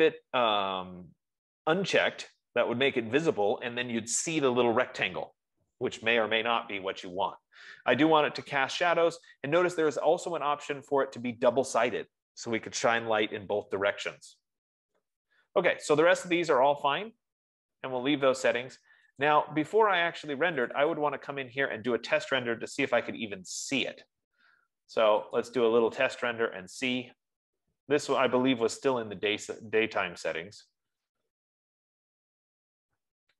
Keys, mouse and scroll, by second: 20.0 click, 21.2 click, 21.5 click, 25.8 click.